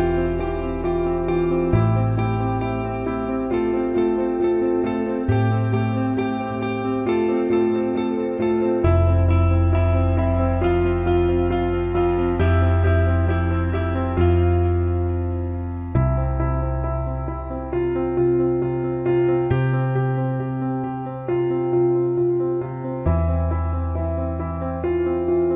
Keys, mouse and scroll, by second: 0.2-1.2 drag, 1.7-3.2 drag, 4.9 click, 13.3-16.3 drag, 17.3 alt+middle click, 17.8 alt+shift+middle click, 18.1 drag, 18.6 alt+shift+middle click, 18.8 alt+shift+middle drag, 19.1-19.6 alt+middle drag, 20.3 alt+shift+middle click, 21.9-22.5 alt+middle drag, 25.3-25.5 alt+shift+middle drag.